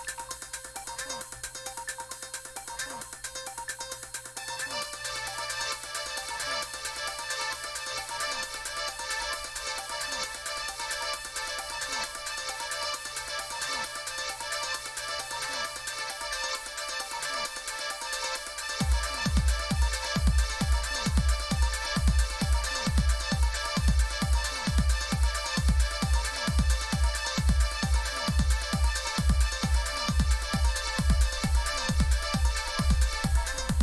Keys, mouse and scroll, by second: 0.0 Escape, 1.5 click, 5.4 click, 8.2 click, 10.2 click, 10.7-11.0 drag, 11.2-14.1 scroll down 2, 14.1-16.7 scroll down 1, 17.0 click, 17.4 click, 18.9 click, 20.6 click, 21.9 click, 25.7 click, 27.1 click, 31.7 click, 32.1 click.